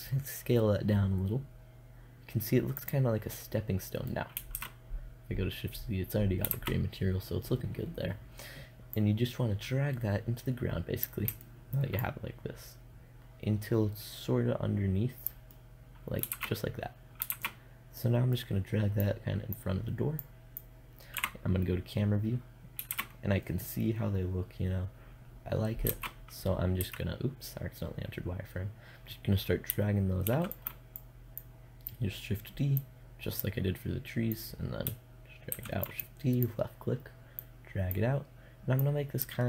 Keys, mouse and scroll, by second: 4.0 shift+z, 6.0 shift+z, 11.4-14.0 middle drag, 15.8 shift+z, 16.8 shift+z, 17.1-19.2 middle drag, 20.6 KP_0, 22.4 shift+z, 25.3 z, 26.2 z, 29.7 shift+d, 30.4-35.0 drag, 35.0 shift+d, 35.5-39.4 drag.